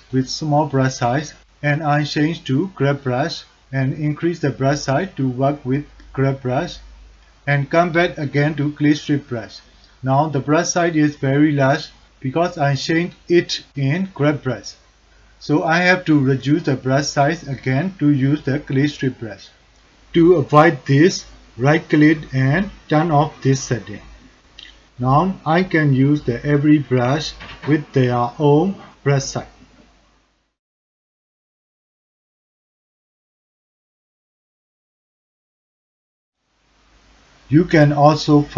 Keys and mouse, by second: 0.8 f, 3.8 click, 4.8 f, 9.4 click, 19.3 ctrl+click, 19.7 alt+shift+click, 19.8 f, 22.5-24.8 drag, 25.3 f, 28.9 click, 30.7 f, 31.3 click, 32.2 click, 33.3-34.4 drag, 34.4 drag, 34.9 drag, 35.3 click, 35.7 click, 36.0 click, 36.3 click, 36.6 click, 36.9 click, 37.3 n.